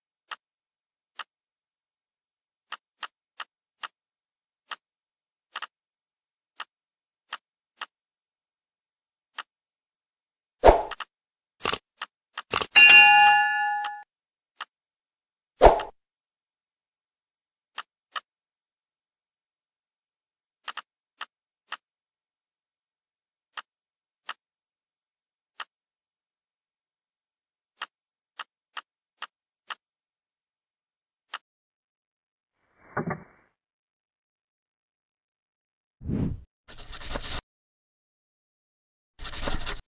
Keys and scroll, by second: 31.1 z.